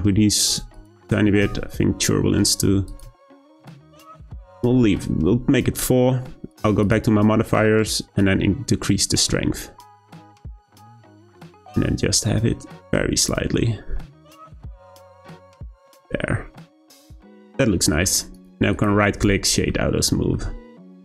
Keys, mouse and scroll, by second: 3.2-6.2 drag, 6.8 click, 8.2-11.2 drag, 15.5-15.9 scroll down 1, 15.9-18.3 middle drag, 18.3 right click, 19.1 click, 19.5 scroll down 2, 19.7-20.4 middle drag, 20.4-20.9 scroll down 2.